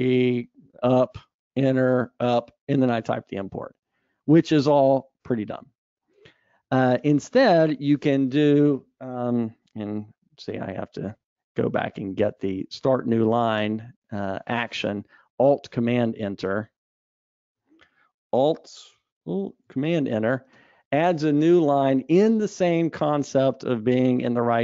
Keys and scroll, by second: 5.7 super+z, 11.0 super+z, 17.3 ctrl+shift+super+z, 20.9 alt+super+Return.